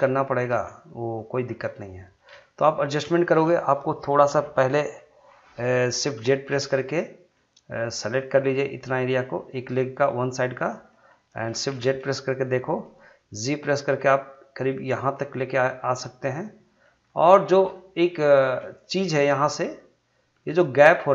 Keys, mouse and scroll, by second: 0.1 ctrl+click, 0.9 middle click, 1.5 scroll up 1, 1.7 middle click, 5.0-6.3 middle drag, 6.3 shift+z, 7.3 middle click, 8.2-10.0 drag, 10.0 middle click, 11.7 shift+z, 12.0-13.4 middle drag, 13.4 g, 14.8 click, 15.1-17.0 middle drag, 17.0 scroll up 1, 17.3 shift+middle click, 17.7 middle click, 18.3 shift+middle click, 19.0 click, 19.5 middle click, 20.9-21.1 scroll up 2.